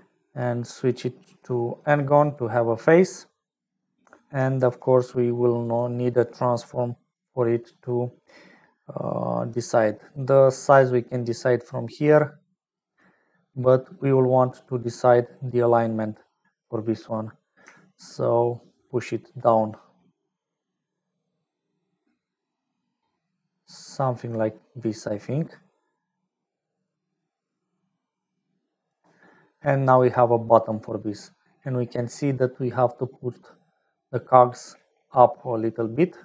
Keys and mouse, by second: 0.8-1.9 middle drag, 4.5 shift+a, 7.5 click, 10.2-12.7 shift+drag, 13.8-15.3 middle drag, 18.4-24.3 shift+middle drag, 25.6-28.3 shift+middle drag, 29.6-31.1 middle drag, 32.4 middle click, 33.4 middle click, 33.8 middle click, 35.4 middle click, 35.9 middle click.